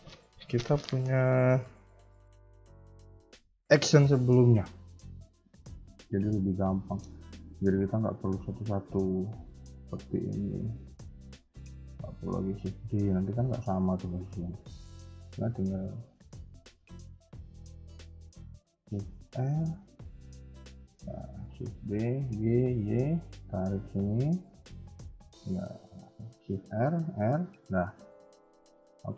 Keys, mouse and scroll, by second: 6.2 shift+middle click, 6.6 scroll up 1, 7.7-9.2 scroll down 1, 9.2 scroll down 1, 9.2 x, 9.7 click, 10.0 x, 10.9 click, 12.3 shift+d, 16.6 g, 18.1 x, 19.2 shift+r, 19.9 click, 20.1 x, 20.9 click, 21.7 shift+d, 26.6 shift+r, 28.3 KP_1, 28.8 KP_3.